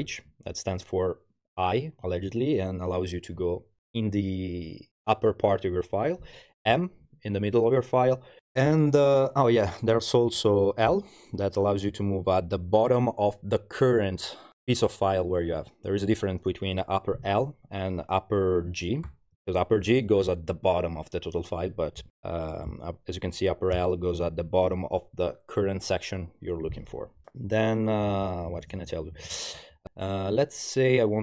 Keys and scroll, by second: 0.0 shift+h, 6.6 shift+m, 10.9 shift+l, 19.1 shift+g, 23.8 shift+l, 28.1 super+-, 29.8 u.